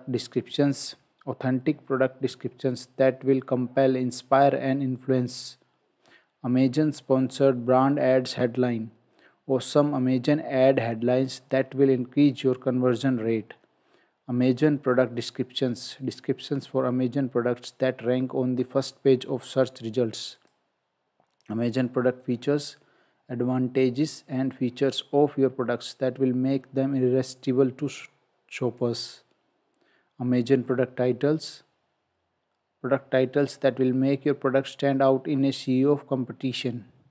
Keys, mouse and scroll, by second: 0.8-1.6 scroll down 1, 28.8 click, 36.5 click.